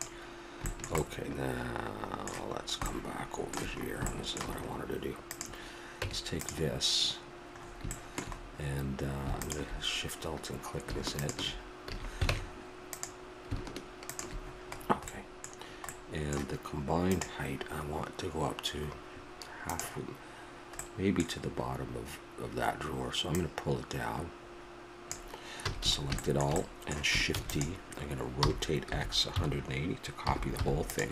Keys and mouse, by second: 0.7 middle click, 1.1-4.6 middle drag, 5.3 right click, 5.9-7.1 drag, 6.0 Tab, 7.6 middle click, 9.4-11.9 drag, 11.9 a, 12.3 ctrl+Tab, 14.1 click, 14.5-17.2 middle drag, 20.9-23.3 middle drag, 23.3-25.0 drag, 25.2 click, 25.6 a, 25.8 a, 27.4 shift+d, 28.4 r.